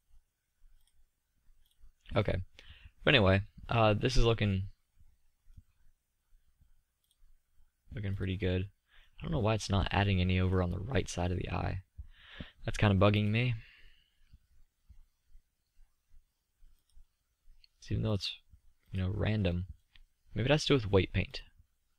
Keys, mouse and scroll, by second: 3.2-3.8 middle drag, 4.3 middle click, 5.1-8.1 middle drag, 10.1-12.1 middle drag, 14.4-16.0 middle drag, 20.6 middle click.